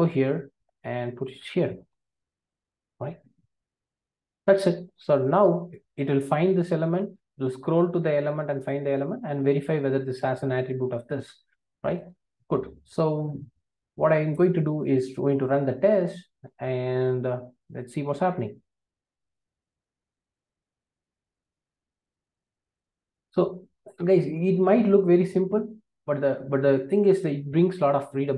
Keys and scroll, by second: 2.1 super+v.